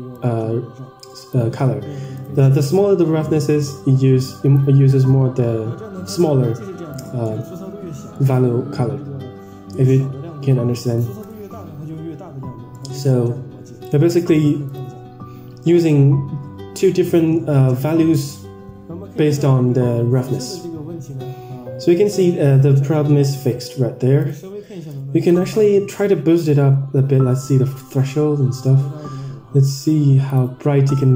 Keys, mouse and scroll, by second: 0.0-1.4 drag, 2.1 click, 3.5-4.6 drag, 6.1-6.8 drag, 7.2 middle click, 8.0 middle click, 10.7 middle drag, 11.1 click, 12.7 middle click, 13.8 click, 14.8 click, 15.9 scroll down 3, 16.1-16.4 scroll up 2, 17.2 scroll down 2, 19.3-19.8 scroll down 5, 19.8-20.9 scroll up 7, 20.9-21.7 scroll down 4, 21.7-22.1 scroll up 3, 22.6-23.3 scroll down 1, 24.1-25.7 drag, 26.3-26.7 scroll down 5, 26.7-27.4 scroll up 6, 27.4-28.6 scroll down 3, 28.6 scroll down 5, 28.8-29.5 scroll up 3, 30.3 click.